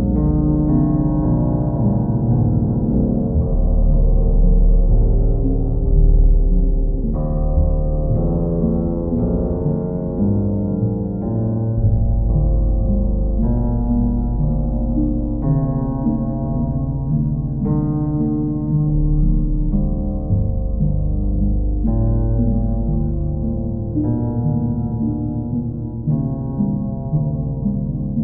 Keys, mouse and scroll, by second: 3.8 click, 4.2 click, 4.6 shift+click, 5.1 alt+click, 6.3 click, 6.7 alt+click, 7.6 click, 10.5 click, 11.3 click, 11.9 click, 12.1 shift+click, 12.8 alt+click, 13.6 click, 14.0 shift+click, 15.2 alt+click, 18.0 alt+click, 23.2 click, 23.6 shift+click, 24.2 alt+click, 25.7 click, 26.4 alt+click.